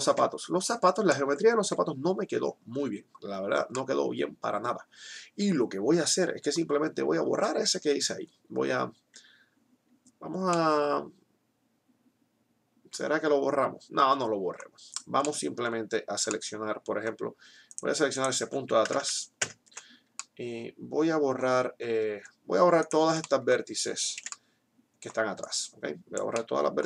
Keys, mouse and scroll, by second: 0.0 KP_3, 1.5 Tab, 9.0-10.5 middle drag, 18.9 ctrl+KP_Add, 22.9 click, 23.2 middle click, 24.0 c.